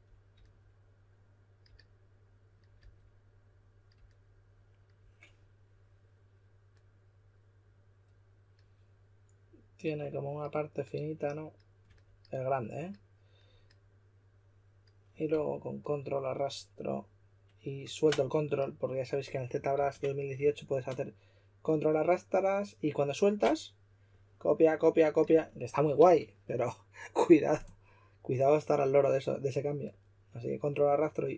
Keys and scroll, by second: 11.8 e, 19.7 super+z, 25.9 super+z.